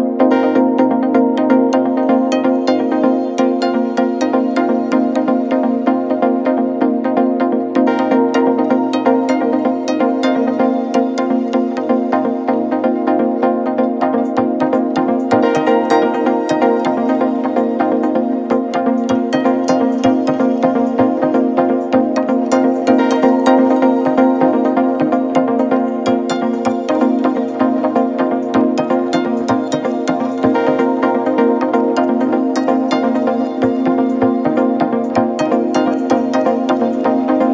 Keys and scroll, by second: 2.1 Delete, 6.8 m, 12.0 Delete, 24.3 ctrl+=, 24.6 ctrl+=.